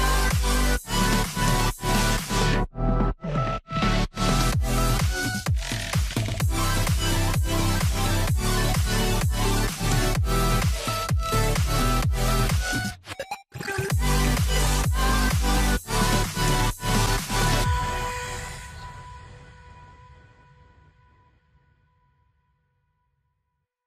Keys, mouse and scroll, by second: 5.4 alt+click, 11.9 double click, 12.7-13.5 typing, 15.4 ctrl+s, 17.7 alt+scroll up 1, 18.5 alt+scroll down 1, 22.6 ctrl+shift+s.